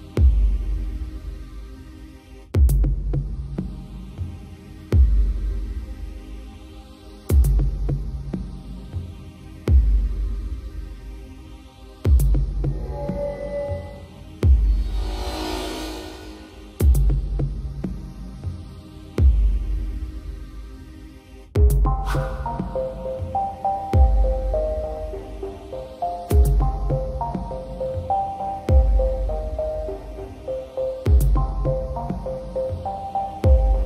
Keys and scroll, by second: 12.7 Return, 18.7 ctrl+t, 24.8 Return, 30.3 ctrl+e.